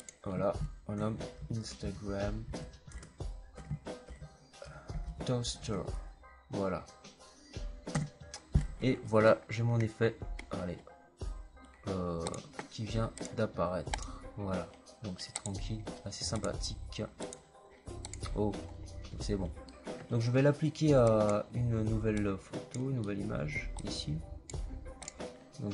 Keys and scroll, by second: 0.6-6.0 typing, 7.8 Return.